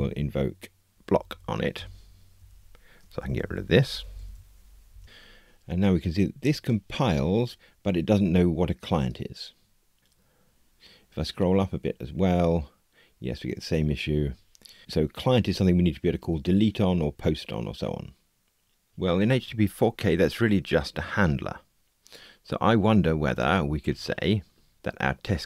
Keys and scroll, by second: 1.7 Return.